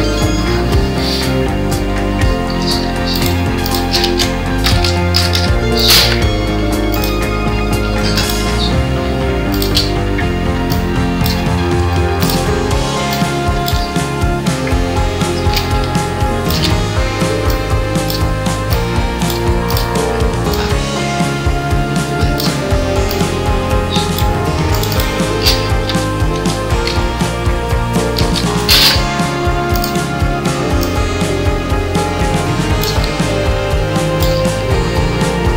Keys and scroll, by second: 26.7 ctrl+..